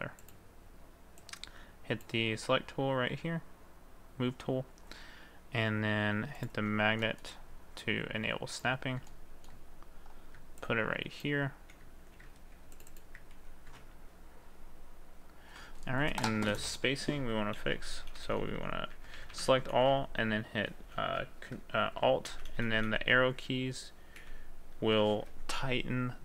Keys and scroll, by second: 11.6 ctrl+a, 12.4 ctrl+z, 13.3 ctrl+a, 17.6 Left, 17.8 Left, 18.9 Right, 19.2 Right, 19.8 Left, 22.3 Left, 22.6 Left.